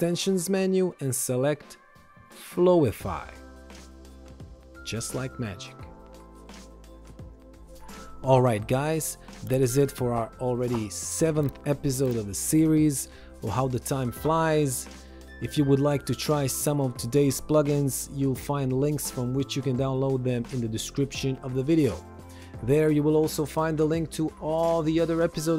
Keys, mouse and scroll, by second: 5.5 ctrl+shift+x, 5.7 click, 6.8 ctrl+1, 6.9 click, 17.7 Escape, 17.9 click, 18.4 ctrl+shift+x, 19.2 click, 22.6 shift+click, 23.4 ctrl+1.